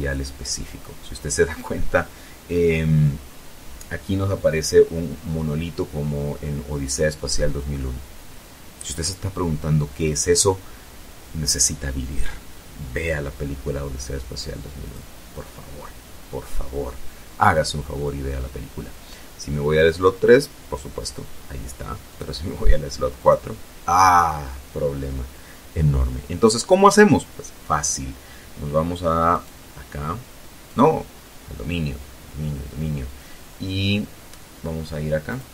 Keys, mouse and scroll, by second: 13.0 click, 18.0 click, 20.3 click, 21.4 click, 27.5 right click, 28.8 right click, 33.5 click, 34.7 click.